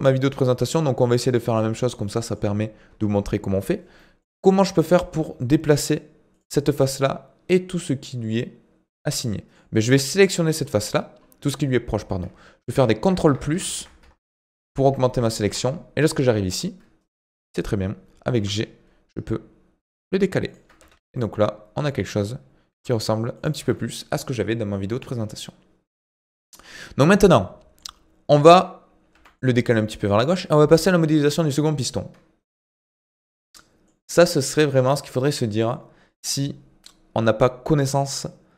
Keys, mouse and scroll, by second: 0.4 middle click, 1.1 click, 1.4-1.7 scroll up 2, 1.7 Tab, 2.0-4.4 middle drag, 4.4 click, 5.8 click, 6.3 click, 9.2-10.6 middle drag, 10.6 scroll up 1, 11.2-12.7 scroll up 3, 12.7 ctrl+KP_Add, 13.0 ctrl+KP_Add, 13.3 ctrl+KP_Add, 13.5 ctrl+KP_Add, 13.8 ctrl+KP_Add, 14.0 ctrl+KP_Add, 14.3 ctrl+KP_Add, 14.6 ctrl+KP_Add, 16.6-17.2 scroll down 2, 17.2 KP_1, 18.4 g, 20.8 Tab, 21.2 middle click, 22.0 Tab, 22.7 g, 23.6 Tab, 23.8-25.3 middle drag, 25.3-26.6 scroll down 6, 26.6-27.1 scroll up 5, 27.1-29.1 middle drag, 29.1 g, 32.7-33.3 scroll down 2, 33.3-36.1 middle drag, 36.1-38.5 scroll up 1.